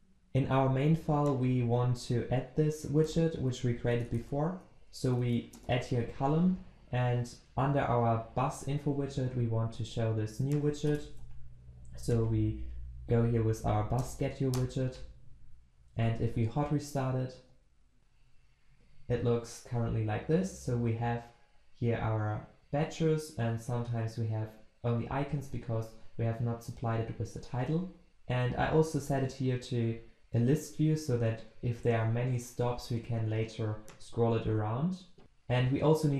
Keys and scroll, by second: 3.1 alt+Return, 11.1 ctrl+v, 13.9 ctrl+v, 14.5 alt+Return, 16.1 ctrl+shift+\.